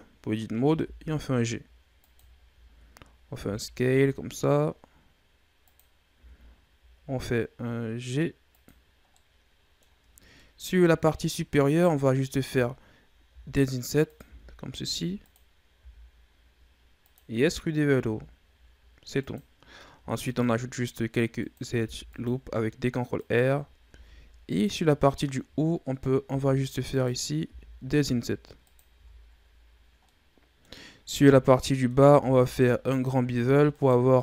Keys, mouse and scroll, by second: 0.6 g, 2.2 scroll down 3, 2.5-3.2 scroll up 7, 3.2 s, 6.0 g, 9.0 middle click, 10.0 scroll down 2, 10.3 middle click, 10.7-11.0 scroll down 6, 11.1-11.6 scroll up 1, 11.6 right click, 13.2 i, 14.1 i, 17.9 e, 19.8 ctrl+r, 21.7 ctrl+r, 23.7 ctrl+Tab, 24.9 right click, 26.1 i, 27.3 i, 28.9 Tab, 29.2-30.0 scroll down 2, 30.0-30.7 middle drag, 30.7 scroll up 1, 30.9 Tab, 31.5 middle click, 32.1 ctrl+Tab, 33.6 alt+right click, 34.0-34.2 middle drag.